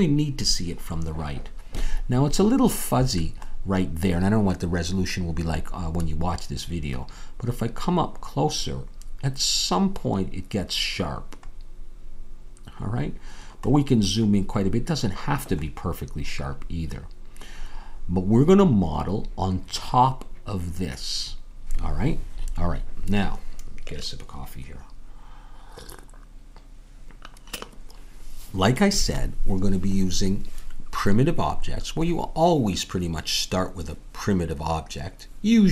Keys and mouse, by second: 14.7-21.5 middle drag.